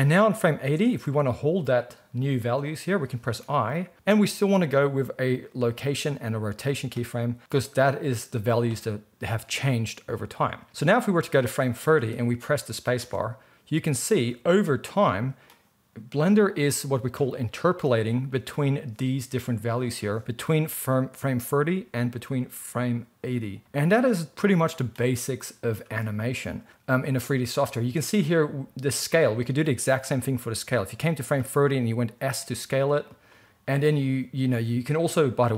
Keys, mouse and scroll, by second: 10.7-33.2 drag, 13.0 space, 14.1 space, 26.0 space, 27.7 space, 32.2 s, 33.2-35.5 middle drag.